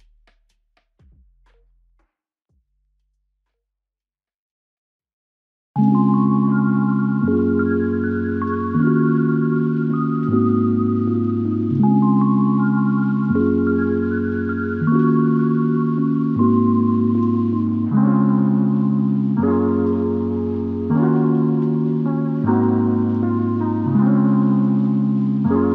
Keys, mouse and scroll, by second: 6.7 shift+click, 8.6 double click, 11.7 double click, 12.4 shift+click, 12.7 shift+double click, 13.2 shift+click, 14.2 ctrl+alt+click, 15.1 alt+shift+click, 15.9 alt+click, 21.0 f, 23.8 ctrl+click, 25.5 ctrl+click.